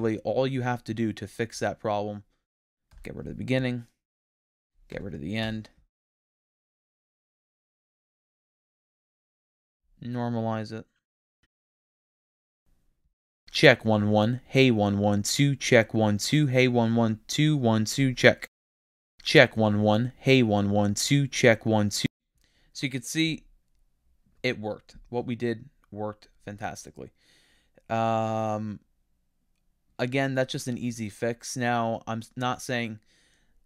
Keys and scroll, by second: 2.9 BackSpace, 5.4 BackSpace.